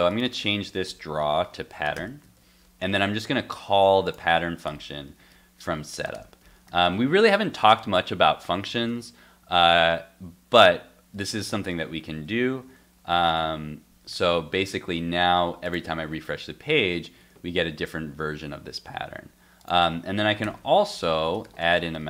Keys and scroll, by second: 2.3 super+s, 6.8 super+s, 11.1 super+s, 12.1 super+s, 12.7 super+Tab, 13.1 super+r, 14.1 super+r, 17.2 super+r, 18.0 super+r, 19.0 super+Tab.